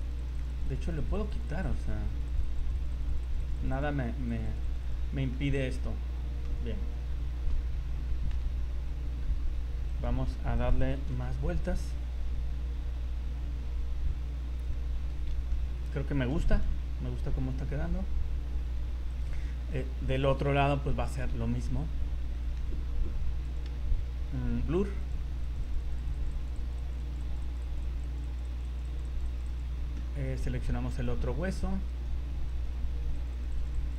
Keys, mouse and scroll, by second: 0.1 click, 0.2 click, 0.4 click, 0.6 click, 0.8 click, 1.0 click, 1.2 click, 1.4 click, 1.6 click, 1.8 click, 2.1 click, 2.3 click, 2.5 click, 2.6 click, 2.7 click, 2.9 click, 3.5 click, 3.6 click, 3.8 click, 3.9 scroll up 2, 4.3 click, 4.6 click, 4.6 click, 4.8 click, 5.1-5.7 scroll down 5, 5.4 middle click, 6.4 KP_7, 7.1 scroll down 1, 8.3 KP_1, 8.8 scroll down 1, 9.9 right click, 10.6 right click, 11.0 r, 15.5 shift+middle click, 16.5 r, 19.1 right click, 19.4 shift+middle click, 20.3 r, 21.4 shift+middle click, 21.8-22.2 scroll up 5, 22.3 shift+middle click, 22.7 scroll up 2, 23.4 click, 25.4 click, 25.6 click, 25.8 click, 26.1 click, 26.3 click, 26.3 click, 26.6 click, 26.8 click, 27.2 click, 27.4 click, 27.6 click, 27.6 click, 27.8 click, 28.0 click, 28.2 click, 28.4 click, 28.6 click, 28.8 click, 29.0 click, 29.3 click, 29.5 click, 29.7-30.2 scroll down 8, 30.9 right click, 31.2 scroll up 2, 31.9 right click, 32.5 right click, 32.8-33.1 scroll up 3, 33.1 click, 33.4 click, 33.6 click, 33.8 click.